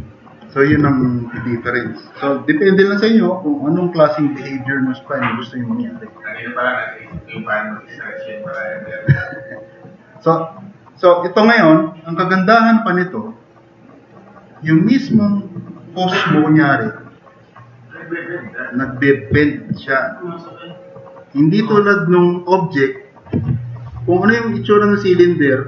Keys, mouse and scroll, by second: 0.9 ctrl+z, 2.5-4.8 drag, 9.2 click, 9.5-10.2 drag, 10.5-11.6 drag, 14.6-15.0 middle drag, 19.4 middle drag.